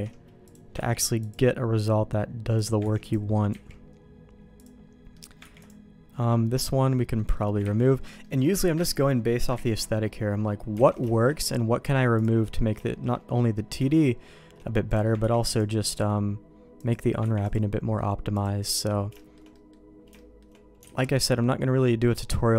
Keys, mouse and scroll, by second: 0.5 click, 1.2 ctrl+e, 2.6 click, 2.8 ctrl+e, 3.5 ctrl+z, 4.6 click, 5.1 middle click, 5.4 ctrl+e, 7.2 middle click, 7.6 ctrl+z, 8.2 middle click, 8.8 ctrl+shift+z, 9.8 ctrl+z, 10.0 middle click, 10.9 alt+a, 11.1 shift+middle click, 12.2 click, 12.8 middle click, 14.9 click, 15.2 ctrl+e, 16.8 click, 17.5 ctrl+e, 18.3 click, 18.7 middle click, 19.2 shift+middle click, 19.5 middle click, 20.1 shift+middle click, 21.0 alt+a, 21.1 middle click.